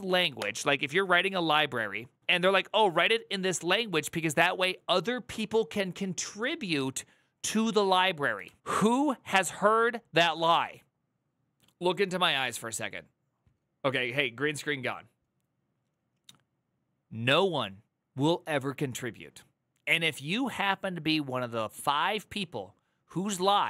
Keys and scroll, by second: 8.2 alt+[.